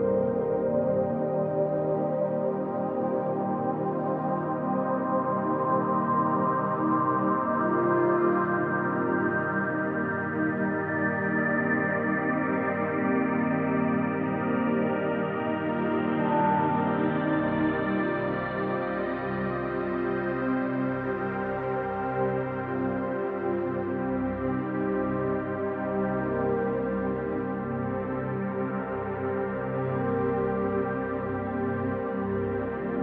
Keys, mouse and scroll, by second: 0.4-0.7 scroll down 2, 0.7-2.2 shift+middle drag, 1.8 e, 2.2 click, 5.0 scroll down 2, 5.2-13.1 middle drag, 6.3 alt+h, 6.7 scroll up 2, 7.6-8.1 scroll up 1, 8.1 scroll down 1, 9.2 KP_1, 9.9-10.5 scroll up 1, 11.5 alt+a, 13.1 click, 13.2 scroll up 1, 13.4-17.1 shift+middle drag, 14.1 ctrl+s, 14.8 b, 17.1 click, 17.9 alt+a, 18.6 b, 20.9 click, 21.2 alt+a, 21.8 b, 23.9 click, 24.4 z, 25.0 scroll down 2, 25.3-33.0 middle drag, 26.0 Tab, 26.1-26.9 scroll down 3, 28.6 ctrl+s, 28.9 scroll down 1, 31.4 F10.